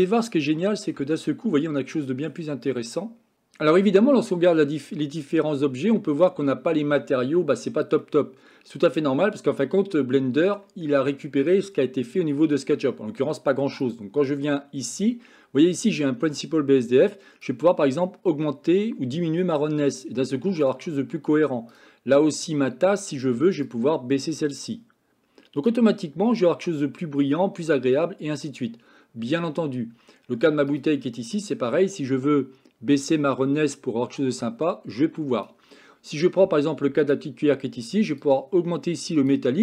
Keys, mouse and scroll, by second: 1.5 middle click, 3.1-39.6 middle drag.